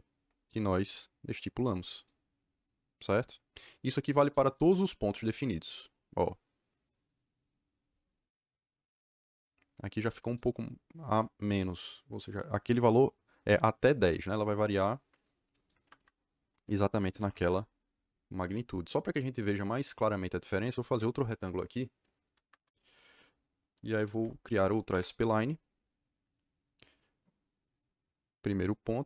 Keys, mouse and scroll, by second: 0.1 Return, 0.5 click, 1.9 click, 3.8-5.0 scroll up 2, 5.0-7.9 scroll down 2, 15.8 Escape, 16.8-17.8 typing, 19.5 click, 20.3 click, 22.4 Escape, 23.5-24.5 typing, 24.9 Return, 28.5 click.